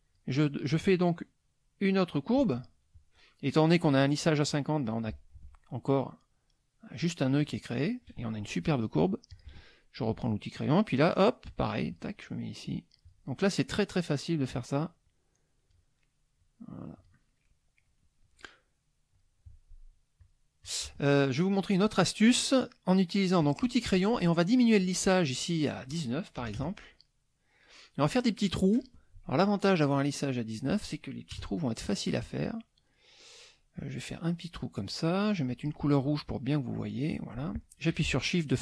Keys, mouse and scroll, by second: 4.4 click, 4.8 click, 9.3 click, 11.4 click, 12.6 click, 14.0 click, 15.0 click, 16.4 click, 17.4 middle click, 19.1 click, 20.2 click, 20.6 click, 21.1 middle click, 23.4 click, 24.7-25.9 drag, 26.4 KP_Add, 27.1 middle click, 28.5 middle click, 29.9 click, 31.3 KP_Add, 31.8 middle click, 33.7-35.5 drag, 36.7 click, 38.5-38.6 shift+drag.